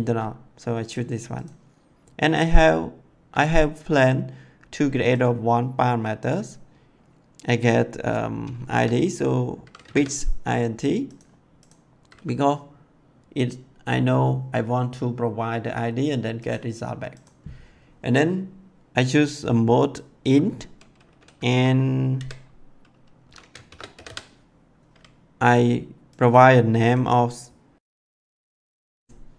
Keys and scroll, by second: 9.8 b, 9.9 i, 22.1 v, 23.6 shift+-, 23.9 i, 24.0 d.